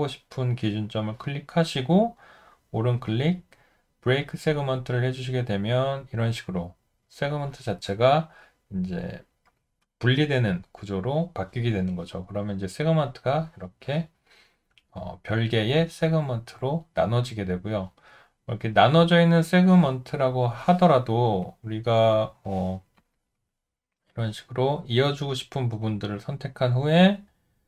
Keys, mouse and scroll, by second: 15.0 alt+middle click, 16.1 alt+right click, 17.0 alt+middle click.